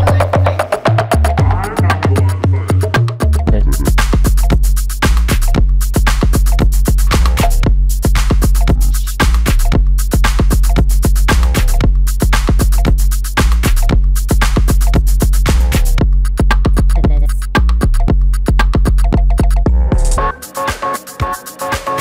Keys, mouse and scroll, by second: 0.6 shift+v, 8.2 shift+Up, 12.3 shift+v, 12.9 shift+Left, 18.8 shift+v, 21.5 shift+8.